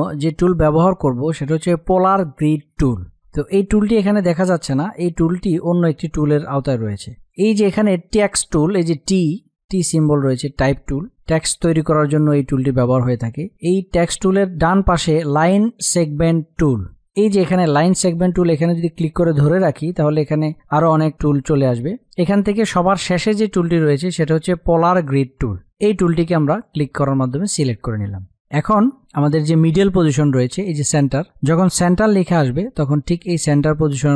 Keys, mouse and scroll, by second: 18.2-26.9 drag.